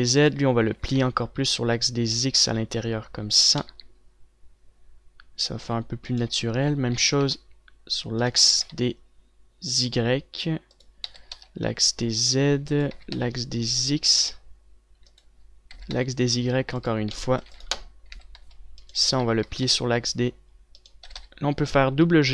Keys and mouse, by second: 1.1 r, 6.0 z, 7.1 z, 7.5 r, 8.9 r, 11.6-16.4 drag, 11.6 r, 13.3 r, 16.2 r, 17.4 click, 17.9 ctrl+s, 18.6 click, 18.6 z, 18.9 a, 19.6 z, 21.2 r, 21.8 g.